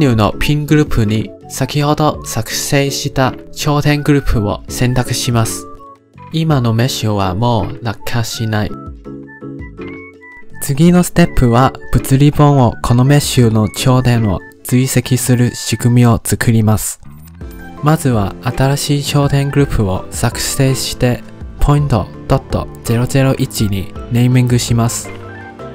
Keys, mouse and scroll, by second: 0.9 click, 1.3 click, 2.3-3.0 scroll down 7, 3.5-4.4 scroll down 13, 4.4-15.5 drag, 17.9 click, 19.4-22.5 drag, 22.5 0, 24.8 Tab.